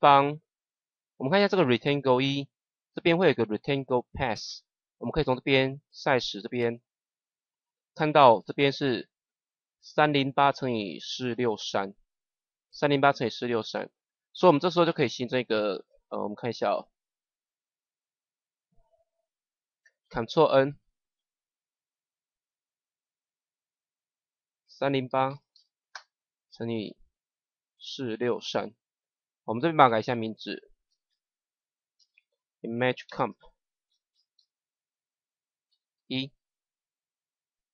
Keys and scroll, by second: 20.6 ctrl+n, 25.0 KP_3, 27.7 KP_4, 31.0-35.9 typing.